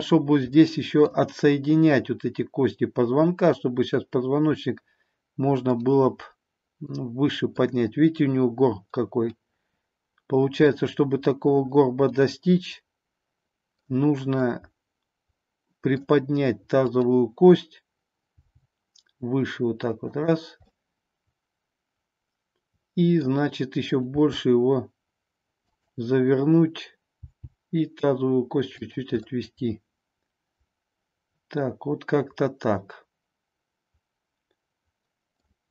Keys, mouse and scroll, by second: 0.5 middle click, 5.8-7.6 middle drag, 9.3-10.8 middle drag, 12.4-13.9 middle drag, 14.3-16.1 middle drag, 18.3 g, 20.2 click, 20.7-23.4 middle drag, 24.1 r, 25.7 click, 27.2 g, 28.8 click, 29.3-35.4 middle drag.